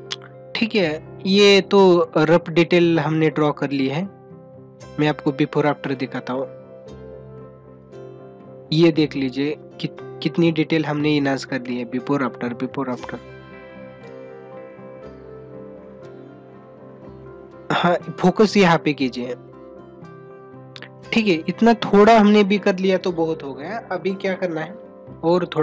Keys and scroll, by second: 2.3 ], 8.1 ctrl+-, 13.3 ctrl+-.